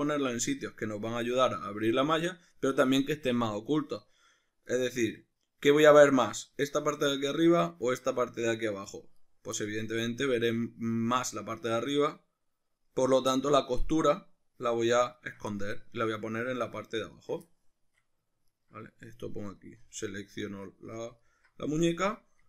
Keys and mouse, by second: 5.5 right click, 6.4 ctrl+right click, 7.2-8.9 middle drag, 8.9 right click, 9.2 right click, 9.6-15.2 middle drag, 15.2 ctrl+right click, 15.7-17.1 middle drag, 17.1 shift+right click, 17.5-18.5 shift+middle drag, 18.5 ctrl+right click, 19.0-20.1 shift+middle drag, 20.1 alt+shift+right click, 21.2 alt+shift+right click, 21.8-22.4 middle drag.